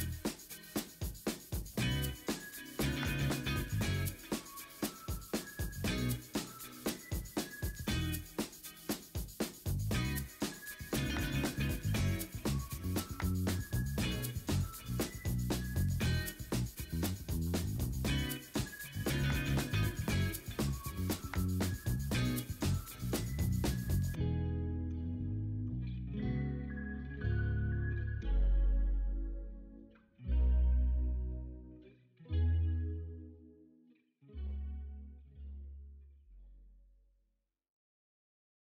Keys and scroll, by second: 2.1 ctrl+i, 2.3-3.4 typing, 5.2 ctrl+z.